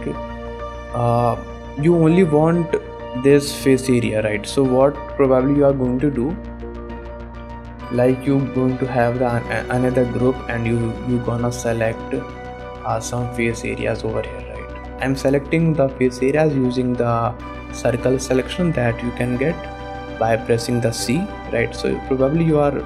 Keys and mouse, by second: 1.4 shift+middle click, 6.5 click, 8.0 click, 10.9 a, 11.6 alt+a, 12.1 c, 21.5 middle click, 22.4 middle click.